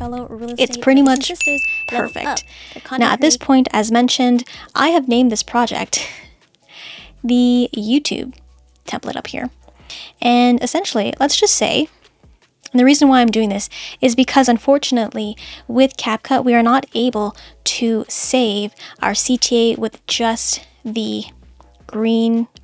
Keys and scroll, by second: 3.3 space, 16.8 BackSpace.